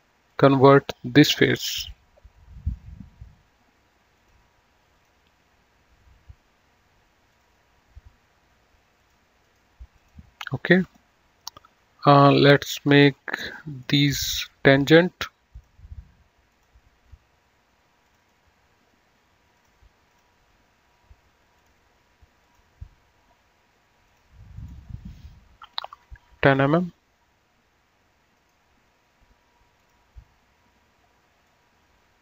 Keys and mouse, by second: 4.3 click, 7.4 click, 9.1 click, 9.6 right click, 10.1 click, 13.9 ctrl+click, 18.2 ctrl+click, 19.6 click, 21.7 click, 24.2 click, 26.2 KP_1, 26.5 KP_0, 26.8 KP_Enter, 28.4 right click, 29.9 click, 31.7 click.